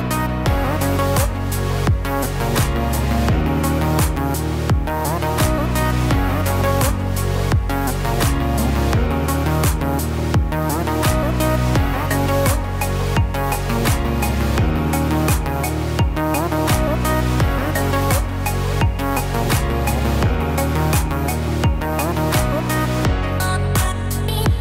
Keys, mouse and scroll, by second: 11.0-11.6 scroll down 3, 11.4 middle click, 14.5 click, 14.7 Tab, 15.2-16.5 scroll up 1, 16.5-17.7 scroll up 5, 18.0 scroll down 2, 18.1 shift+middle click, 19.3 e, 22.2 e.